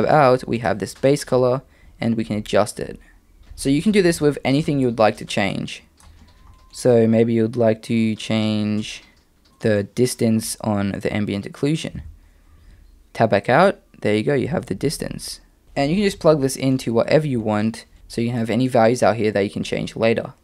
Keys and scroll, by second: 3.4 Tab, 12.0 Tab, 18.0 Tab.